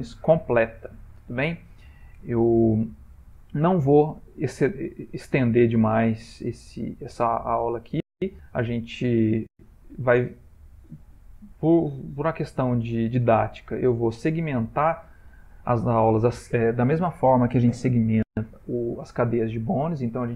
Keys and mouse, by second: 8.6 middle click, 9.9 shift+middle click, 11.2 middle click, 11.8 middle click, 14.0 shift+middle click.